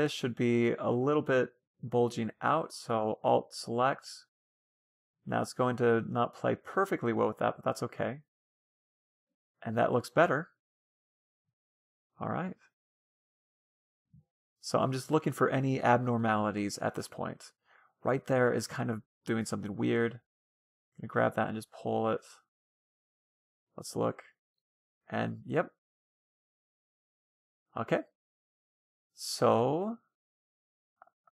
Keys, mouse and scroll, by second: 1.0 Tab, 2.0-4.5 right drag, 4.1 middle click, 4.5-5.7 middle drag, 5.1-6.8 drag, 6.8 Tab, 6.9-8.4 middle drag, 9.5-11.5 middle drag, 14.6 Tab, 14.8-18.1 middle drag, 16.2 Tab, 18.8 Tab, 19.3 a, 19.7 c, 20.4 middle click, 20.6 g, 22.9 Tab, 23.0-24.6 middle drag, 24.6-25.0 scroll down 1, 25.0-26.7 middle drag, 26.9 scroll down 1, 27.0-30.1 middle drag, 30.6-31.1 scroll down 1, 31.1-31.3 middle drag.